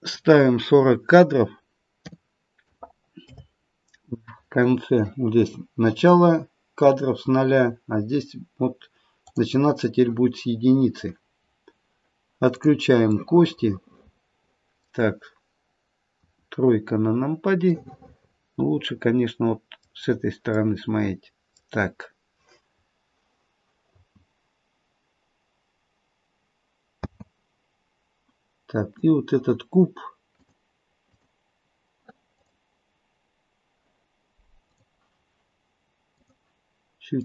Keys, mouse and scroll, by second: 9.1 click, 12.5 click, 13.2 middle click, 13.5 middle click, 16.1 KP_3, 17.9 middle click, 20.0-20.6 scroll down 1, 20.6 middle click, 20.6 scroll down 3, 23.9 space, 28.8 click, 30.2 click, 34.6 click.